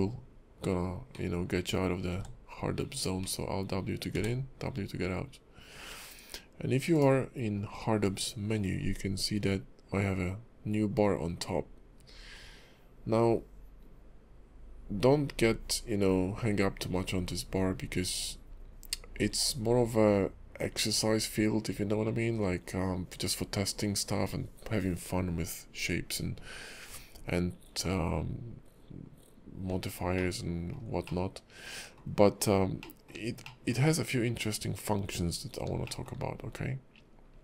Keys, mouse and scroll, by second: 1.1 alt+w, 2.5 w, 3.2 alt+w, 3.4 alt+w, 3.6 alt+w, 3.8 alt+w, 6.9 click, 30.1 shift+middle click, 31.0 middle click, 32.3-32.8 scroll down 1, 32.8 middle click, 33.4 shift+middle click, 35.3-35.7 scroll down 2, 36.1 shift+middle click.